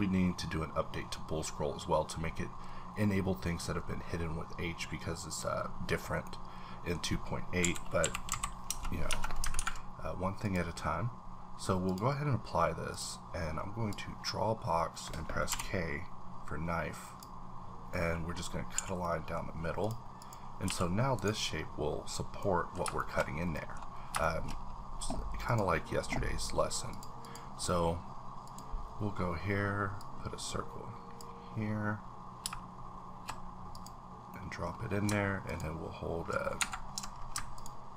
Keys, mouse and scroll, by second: 6.2-8.0 middle drag, 6.2-6.5 scroll down 1, 7.6 KP_7, 8.0 KP_5, 8.3 KP_Decimal, 8.7 Tab, 9.1 Tab, 9.5 ctrl+`, 10.4 click, 11.8 click, 12.9 click, 13.9-17.9 drag, 17.9 middle click, 18.6 a, 19.0 middle click, 19.7 click, 20.2 click, 20.7 g, 21.2 right click, 22.4 middle click, 22.6 scroll up 1, 23.0 shift+middle click, 23.2 scroll up 1, 24.2 shift+middle click, 24.5-25.4 scroll up 1, 25.4 click, 26.9 click, 27.2 click, 28.4 click, 30.0-34.3 drag, 34.3 middle click, 34.7 scroll up 2, 35.4 ctrl+click, 36.6 Escape.